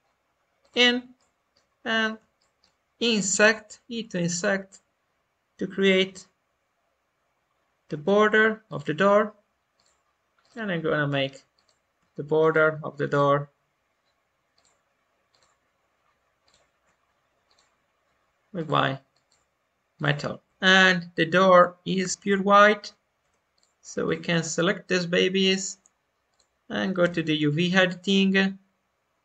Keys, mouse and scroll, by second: 1.1 middle click, 1.9 scroll up 1, 2.3-3.3 shift+middle drag, 3.3 i, 9.7-19.4 drag, 20.4 Tab, 23.5-26.5 drag, 26.9 u.